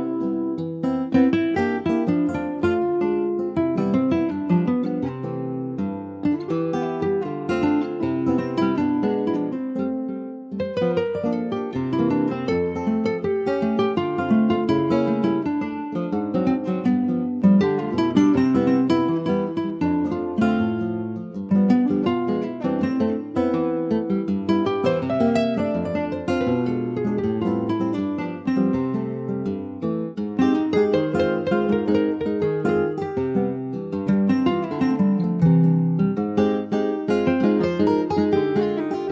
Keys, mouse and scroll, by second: 0.5 click, 0.9 scroll down 1, 1.0-2.3 middle drag, 2.3 click, 2.7 shift+middle click, 3.3 scroll up 1, 3.4 middle click, 4.3-5.6 drag, 6.0-7.5 drag, 7.5 KP_9, 8.4 click, 8.9 click, 9.4 shift+middle click, 10.2-10.8 scroll up 1, 10.8-12.4 middle drag, 12.4 scroll up 1, 13.9-14.5 scroll down 1, 14.5-15.8 middle drag, 19.2 scroll up 2, 19.8-21.1 middle drag, 21.4 shift+middle click, 22.2 scroll down 2, 22.4-23.6 shift+middle drag, 23.6 scroll up 1, 24.2-29.1 ctrl+middle drag, 30.3 ctrl+s, 31.2-33.8 middle drag, 33.8 ctrl+s, 34.1 middle click, 34.4 shift+a, 35.3 click, 35.6 shift+a, 37.2-37.6 scroll down 2, 37.6 alt+middle click, 38.0 s.